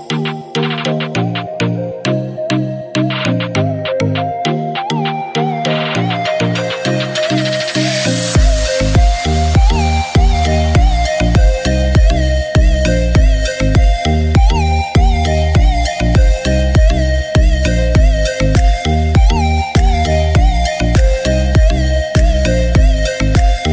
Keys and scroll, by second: 15.7 Down, 16.1 Down, 16.5 Down, 16.9 Down, 17.2 Down, 17.7 Down, 18.1 Down, 19.6 Down, 20.1 Up.